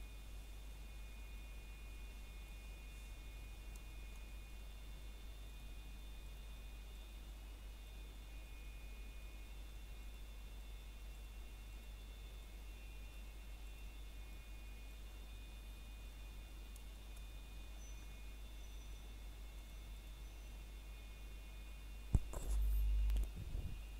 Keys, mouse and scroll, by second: 0.5 middle click, 1.0 click, 1.5 ctrl+click, 1.7 middle click, 2.3 click, 3.1 middle click, 3.7 click, 5.1 scroll down 1, 5.5 middle click, 6.6 scroll up 1, 7.2 click, 9.9 middle click, 10.8-11.3 scroll up 1, 11.5 click, 11.8 middle click, 12.3 click, 16.3-16.6 scroll down 1, 16.6 middle click, 17.3 scroll down 1, 17.6 middle click, 17.9 shift+middle click, 18.2 scroll up 1, 18.8 middle click, 20.0 scroll up 1, 20.4 click, 20.8 ctrl+click.